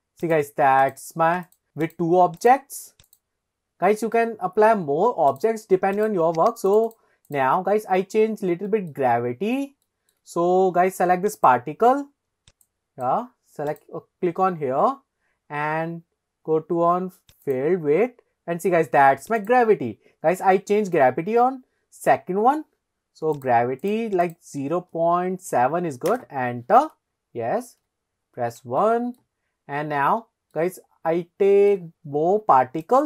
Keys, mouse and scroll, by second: 0.3 click, 0.8 click, 1.5 click, 1.8 click, 2.4 click, 3.1 click, 5.3 click, 6.0 click, 6.5 click, 6.7 click, 7.7-8.4 scroll down 3, 8.7 shift+middle click, 9.2-9.6 middle drag, 9.9 shift+middle drag, 11.4 click, 12.6 click, 13.7 click, 14.5-15.2 scroll down 1, 15.2-16.4 scroll down 4, 17.4 click, 17.9-18.4 scroll down 2, 19.4-23.4 drag, 24.3-26.2 drag, 27.9 KP_1, 28.8-29.2 shift+middle drag, 29.4-29.7 scroll down 2, 30.6-31.8 middle drag, 32.8 click.